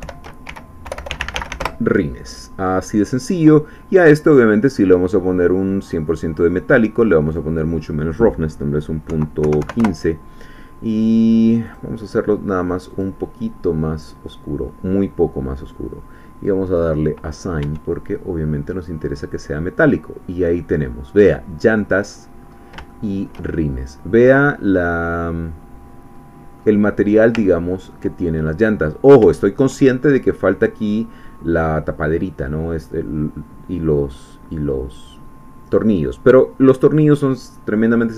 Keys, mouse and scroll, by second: 0.0 shift+End, 0.5-1.5 typing, 1.6 Return, 4.9-6.1 drag, 7.3-8.9 drag, 9.1 ., 9.4 1, 9.6 5, 9.8 Return, 11.7 click, 12.9 click, 13.7-14.3 scroll down 3, 16.7 click, 17.6 Tab, 18.1-22.4 middle drag, 22.4-22.8 scroll up 2, 22.9 shift+middle click, 23.9-26.9 middle drag, 26.9 scroll up 2, 27.4 ctrl+middle click, 28.9 scroll down 2, 29.3 shift+middle click.